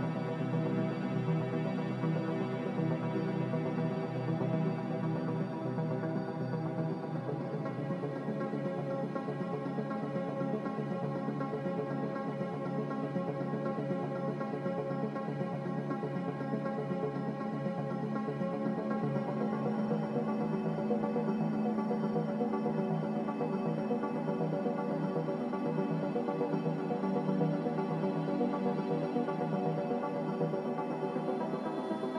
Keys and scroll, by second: 13.4-14.0 typing, 16.7-19.5 typing, 20.9 typing, 22.6-23.4 typing, 31.0-31.9 typing.